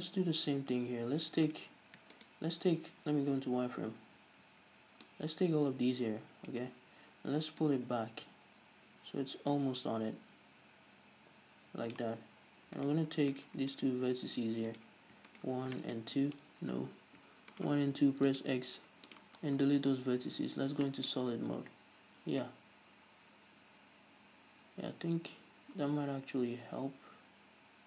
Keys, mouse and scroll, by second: 0.1-1.7 scroll up 2, 1.7-3.2 right drag, 3.2 z, 4.4 a, 5.3 click, 7.0-7.8 scroll up 1, 7.8-13.0 drag, 13.0 alt+right click, 13.5-14.0 right drag, 14.9 right click, 15.6 shift+right click, 16.0-17.7 shift+middle drag, 16.2-16.7 scroll up 2, 16.7-17.0 scroll up 1, 17.0 ctrl+z, 17.7-18.1 shift+right drag, 18.1 x, 19.6-20.1 scroll down 2, 20.1 z, 20.6-21.1 scroll down 2, 21.1-27.8 shift+middle drag.